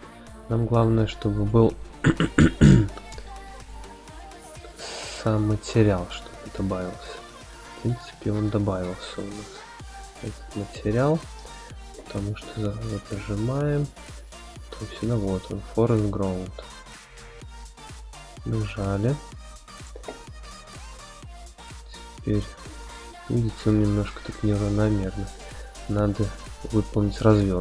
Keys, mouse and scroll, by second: 1.3 click, 2.0 x, 2.8 click, 3.2 x, 4.1 click, 4.5 x, 5.2 click, 5.6 x, 6.4 click, 6.8 x, 7.7 click, 8.1 x, 9.1-9.5 shift+middle drag, 10.0-10.9 middle drag, 11.6 click, 14.1-17.9 drag, 20.6-20.9 scroll down 1, 22.0 click, 22.0-22.8 scroll down 3, 22.9 shift+middle click, 23.8 middle click, 24.3 shift+middle click, 26.1-27.6 drag.